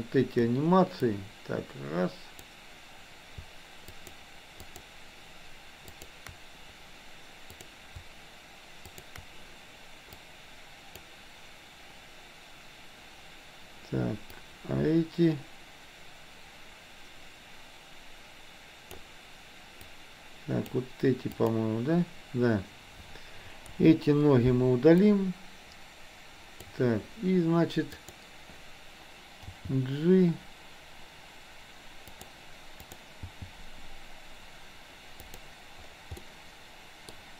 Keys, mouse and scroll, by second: 1.1-2.6 drag, 4.0 shift+click, 5.9 shift+click, 7.6 drag, 8.9 shift+click, 10.1-11.1 drag, 14.4-19.0 drag, 19.9 click, 21.4 click, 23.8 Delete, 25.1-26.8 drag, 28.0 click, 29.5 g, 32.9 click, 33.3 g, 36.3-37.1 scroll up 1.